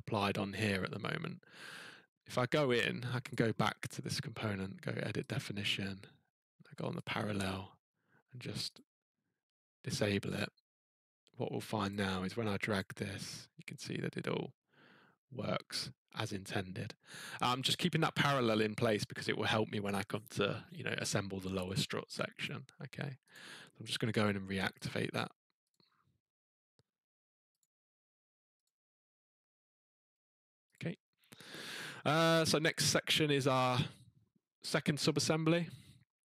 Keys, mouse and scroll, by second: 0.5-1.0 scroll, 3.3 click, 5.3 click, 7.0 click, 8.7 click, 10.3 click, 11.9 click, 12.7 click, 18.0 middle click, 22.4 click, 22.4 scroll, 23.3 click, 24.8 click, 25.7 click, 27.6 click, 28.6 click, 30.8 click, 31.9-32.9 scroll.